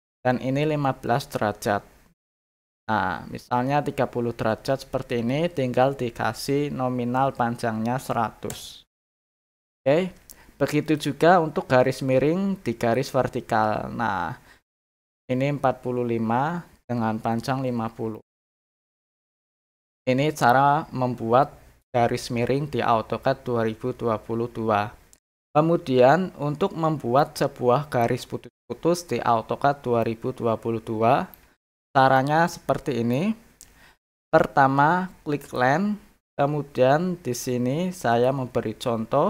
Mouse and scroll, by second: 10.8 click, 12.8 click, 18.1 middle click, 27.1 middle click, 30.0-31.3 middle drag, 32.1 middle click, 35.4 click, 38.1 click.